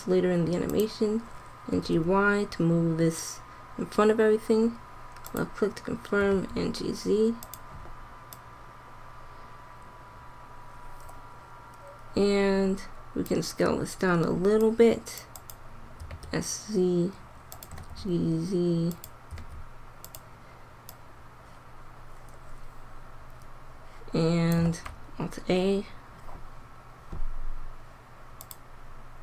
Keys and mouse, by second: 1.6 g, 6.1 g, 8.4-10.0 drag, 14.6-16.7 drag, 16.0 s, 17.6 g, 19.2 s, 20.8-22.0 drag, 24.6 alt+a, 28.4 click.